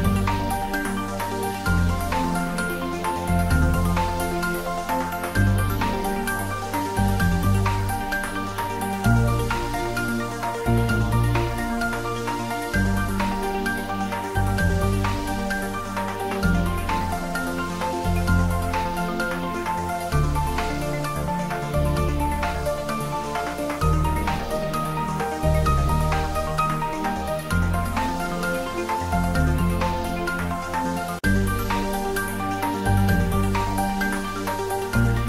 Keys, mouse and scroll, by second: 1.2 r, 2.0 click, 2.2 s, 2.8 click, 3.7 r, 4.1 click, 4.3 ctrl+z, 4.6 click, 5.1 r, 5.6 click, 5.9 s, 6.9 click, 7.4 s, 8.1 click, 8.7-9.1 scroll down 1, 9.4 r, 10.9 click, 11.3 s, 11.8 click, 12.0 s, 13.4 click, 13.6 s, 14.1 click, 15.3 g, 15.7 click, 16.0 s, 16.4 click, 16.9 g, 17.8 click, 18.5 scroll down 1, 19.2 middle click, 20.1 click, 21.5 g, 21.7 z, 22.7 click, 23.2 g, 23.8 click, 25.0 g, 26.3 click, 26.6 scroll down 1, 27.4 3, 27.9 scroll down 1, 28.2 middle click, 28.7 scroll down 1, 29.2 click, 29.8 r, 30.5 click, 30.8 g, 31.7 click, 32.0 r, 32.5 click, 32.8 g, 33.9 click, 34.1 middle click, 34.6-35.2 scroll down 1.